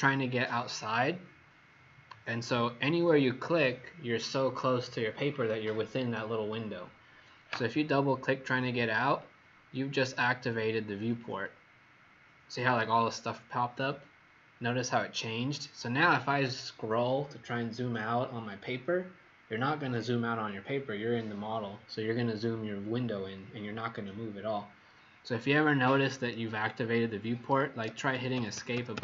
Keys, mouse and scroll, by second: 11.0 click, 11.3 click, 27.8 Escape, 28.3 Escape, 28.5 Escape, 28.7 Escape, 28.9 Escape.